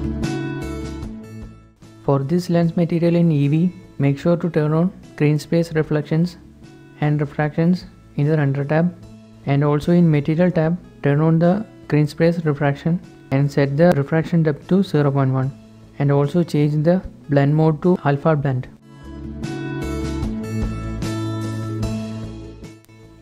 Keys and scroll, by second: 23.0-23.2 typing.